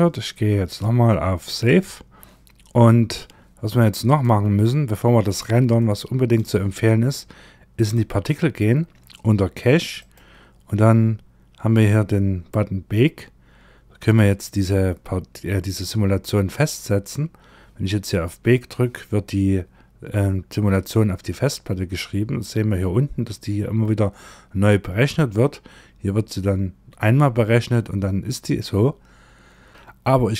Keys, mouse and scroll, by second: 0.1 click, 3.5 click, 4.7-5.2 scroll up 3, 5.2 shift+middle click, 7.2 click, 8.0-9.4 scroll down 4, 9.4 click, 10.4-10.9 scroll down 1, 10.9-13.4 scroll down 1, 13.4-14.3 scroll down 2.